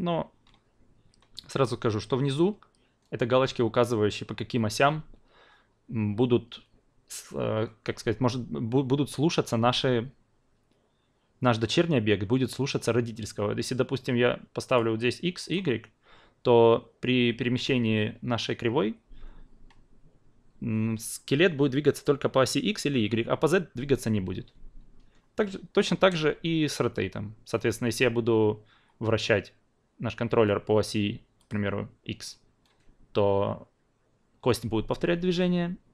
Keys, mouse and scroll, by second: 15.4 click.